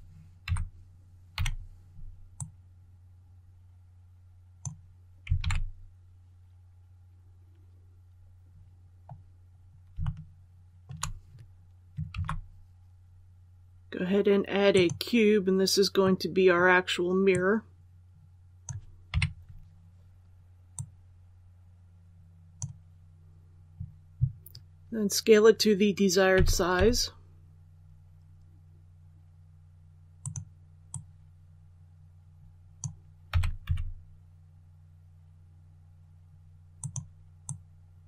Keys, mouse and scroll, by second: 0.3-1.2 typing, 2.3-5.0 drag, 5.3 alt+a, 8.4 scroll down 1, 9.9 shift+middle click, 12.0 shift+a, 14.6 click, 15.9-17.0 middle drag, 17.2-19.0 drag, 19.0 KP_1, 20.6-23.0 drag, 26.2-26.7 typing, 30.1-33.0 drag, 33.2-33.5 typing, 36.7-38.0 drag.